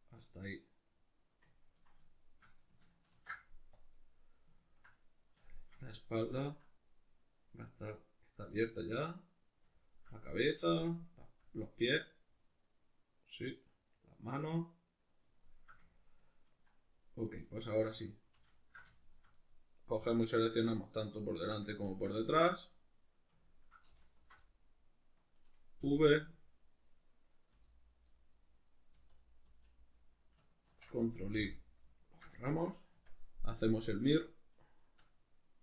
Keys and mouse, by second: 2.2 shift+right click, 3.2 ctrl+e, 4.1-17.4 middle drag, 17.4 alt+right click, 18.6 alt+shift+right click, 18.9-24.1 shift+middle drag, 24.1 alt+shift+right click, 24.4-26.2 middle drag, 25.8 v, 26.2 right click, 27.0 right click, 27.5 l, 28.1-33.6 middle drag, 29.0 l, 30.7 ctrl+i, 31.4 h, 33.0 Tab, 33.6-35.6 drag, 35.0 Escape.